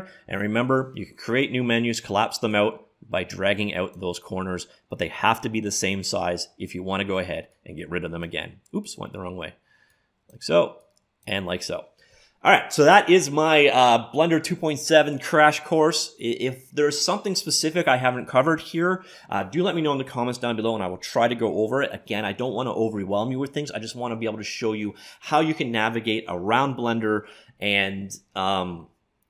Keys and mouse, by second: 2.6-9.4 drag, 10.0-12.7 drag.